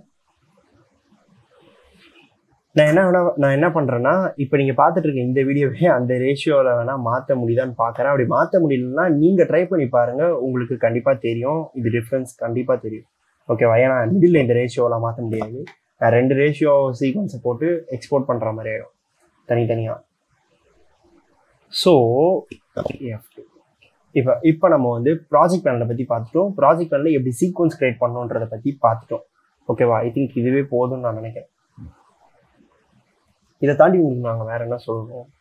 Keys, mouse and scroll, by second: 0.2 click, 2.7 click, 3.1 `, 23.6 F2.